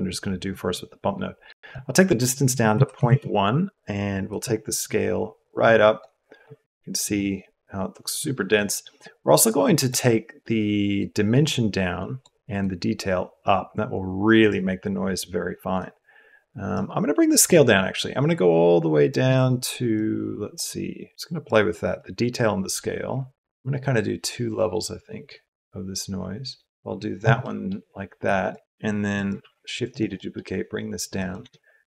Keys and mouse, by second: 1.7-3.0 drag, 4.2-5.9 drag, 6.9-8.5 drag, 9.5 click, 10.9-12.2 drag, 12.5-14.5 drag, 15.7 click, 17.4-19.1 drag, 20.0 click, 21.1 click, 22.0-26.7 drag, 27.5 click, 28.2 click, 29.1 click, 29.3 shift+d, 30.2 click, 31.3 shift+a.